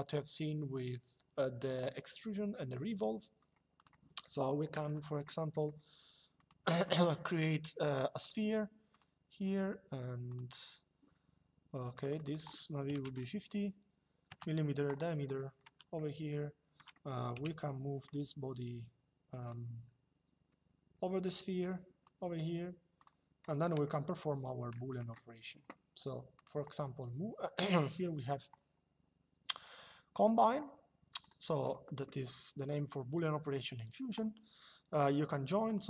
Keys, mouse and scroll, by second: 3.5 click, 4.6 click, 5.2 middle click, 8.0 click, 10.0 click, 11.7 click, 12.6 KP_5, 14.0 KP_Enter, 15.6 middle click, 17.7 click, 19.2 click, 22.7 click, 23.5 shift+middle click, 26.1 click, 30.9 click, 35.4 click.